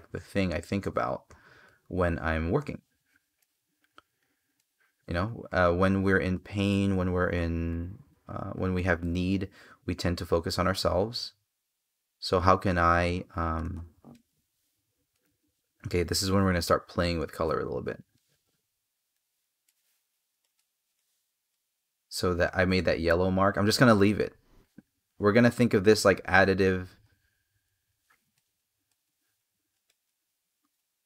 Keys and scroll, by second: 22.2 space.